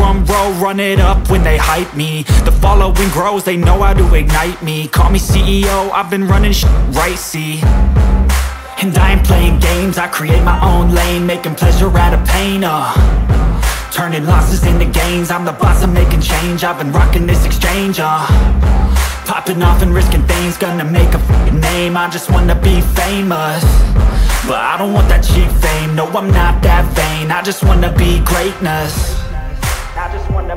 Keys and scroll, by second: 1.5 ctrl+shift+space, 7.7 ctrl+space, 11.0 ctrl+[, 14.1 ctrl+t, 22.5 ctrl+space.